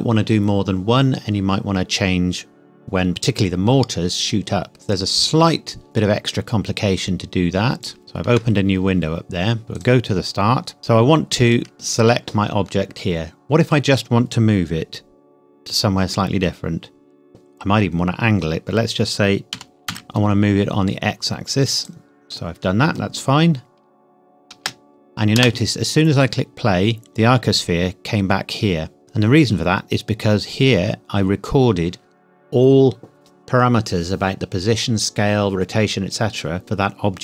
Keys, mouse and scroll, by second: 4.7 space, 5.0 click, 8.0 shift+middle click, 9.1-9.6 scroll up 1, 9.6 shift+middle click, 9.8 click, 10.4-10.8 scroll up 1, 10.8-11.5 scroll down 1, 11.5 click, 13.5-15.5 scroll down 1, 19.5 g, 19.9 x, 21.8 click, 23.5-24.2 scroll down 1, 24.2-24.5 scroll up 1, 24.5 space.